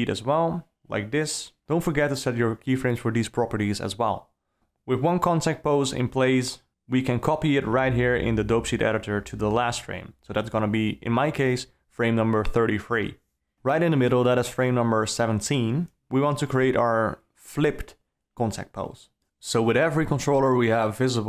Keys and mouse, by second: 0.8 r, 4.6 alt+a, 5.3 a, 7.0 click, 7.8 shift+d, 8.8 shift+Right, 9.4 s, 10.5 Left, 11.9 alt+a, 13.0 a, 19.6-21.2 right drag.